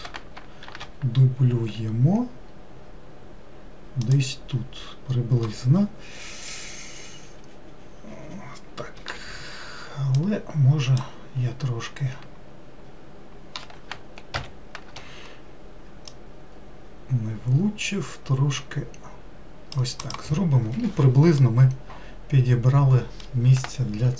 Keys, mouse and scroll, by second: 0.7 shift+d, 10.2 click, 14.4 ctrl+l, 16.2 click, 20.1 click, 21.5-24.1 middle drag.